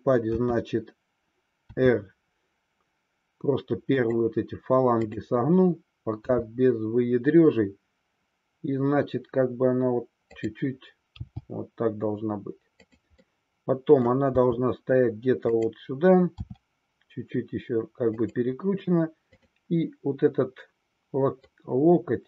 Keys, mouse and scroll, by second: 4.1 click, 5.2-6.4 drag, 6.5 r, 10.5 click, 12.9 click, 13.4 middle click, 14.5 g, 15.6 click, 16.5 r, 18.3 click, 21.5-22.2 middle drag.